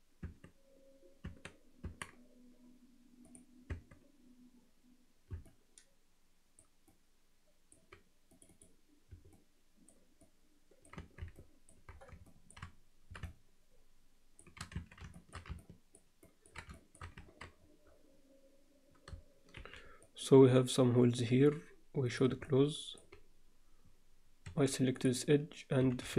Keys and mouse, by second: 0.3 Tab, 1.3 Tab, 1.9 Tab, 3.3 click, 3.7 Tab, 5.5-6.6 alt+middle drag, 6.9 alt+middle click, 8.5 click, 9.3 alt+middle click, 10.2 middle click, 11.0 Tab, 11.4 alt+middle click, 12.3 alt+shift+middle click, 13.3-14.4 alt+shift+middle drag, 14.7 Tab, 15.1 alt+shift+middle click, 15.6 ctrl+middle click, 16.2 ctrl+middle click, 16.7 shift+middle click, 19.5 shift+b, 22.1 click, 22.5 alt+middle click, 24.5 2, 25.9-26.1 typing.